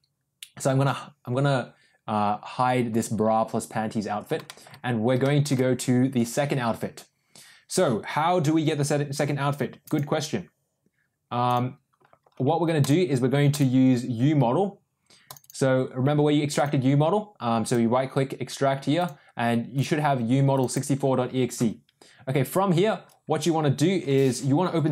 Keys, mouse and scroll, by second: 3.0 click, 4.4 shift+middle click, 5.2 shift+middle drag.